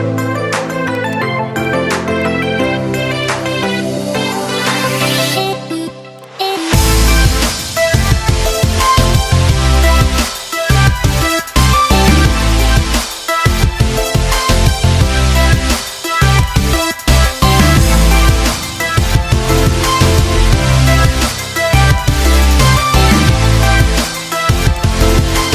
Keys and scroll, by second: 4.3 ctrl+z, 12.5 ctrl+a, 13.8 ctrl+x, 20.4 ctrl+v.